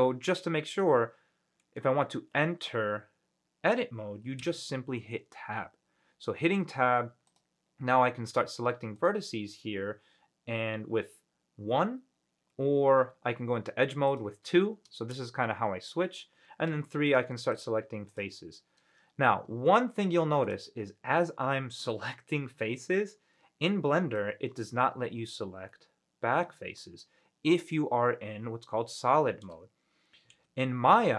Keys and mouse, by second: 0.0 click, 1.0-2.0 middle drag, 4.6 Tab, 7.4 click, 9.1 click, 13.2 2, 14.3 click, 16.9 3, 17.3 click, 18.3 click, 19.9 shift+middle click, 25.9-29.7 middle drag.